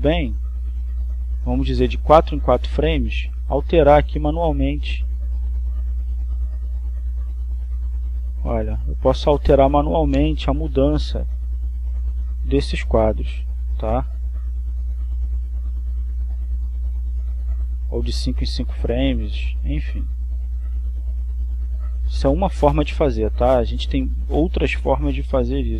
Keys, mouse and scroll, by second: 5.7 click, 6.8-8.1 drag, 9.3 click, 10.8-12.0 drag, 12.6 click, 14.5-15.6 drag, 16.1 click, 17.5-19.4 drag, 20.2 click, 20.9 click, 21.9-23.9 drag, 25.1 click.